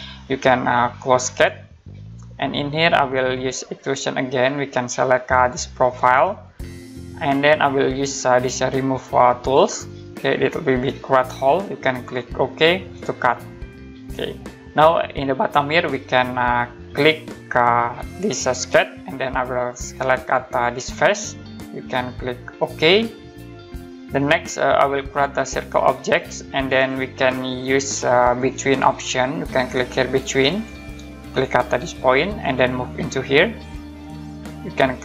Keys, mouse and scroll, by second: 1.3 click, 3.8 click, 5.9 click, 9.5 click, 13.2 click, 14.1 middle click, 18.6 click, 20.9 click, 22.6 click, 24.2 scroll up 1, 26.1 click, 28.2 click, 30.5 click, 32.4 click, 33.9 click.